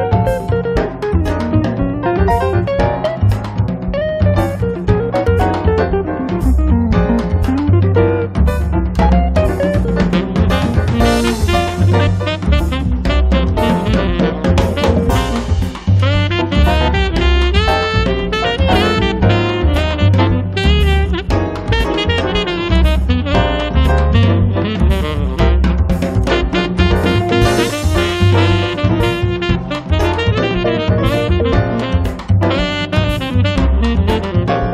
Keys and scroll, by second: 1.7 space, 8.5 space, 9.1 Escape, 21.9 1, 22.2 0, 23.1 space.